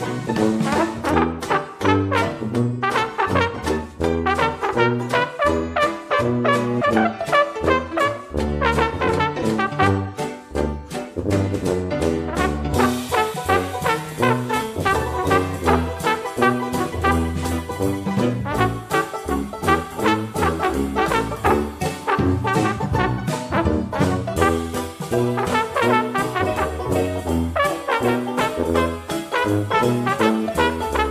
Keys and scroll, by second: 3.8 ctrl+g, 7.0 ctrl+d, 10.3 ctrl+d, 14.9 ctrl+d, 25.9 ctrl+g.